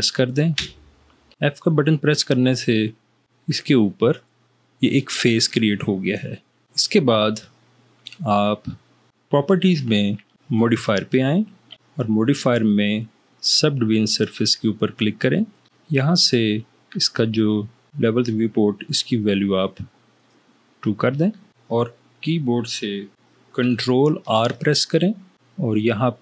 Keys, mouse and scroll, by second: 0.8 f, 24.5 ctrl+r.